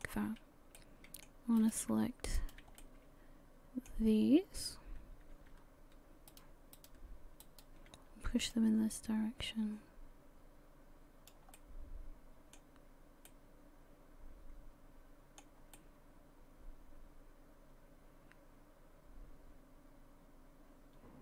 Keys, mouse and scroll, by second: 0.4-0.8 scroll up 1, 0.8 middle click, 1.6 right click, 2.4 shift+right click, 2.8 middle click, 4.4 scroll down 1, 6.3 shift+right click, 6.8 shift+right click, 7.9 shift+right click, 8.5 click, 11.6 middle click, 12.8-13.3 scroll up 1, 13.3 middle click, 15.8 middle click.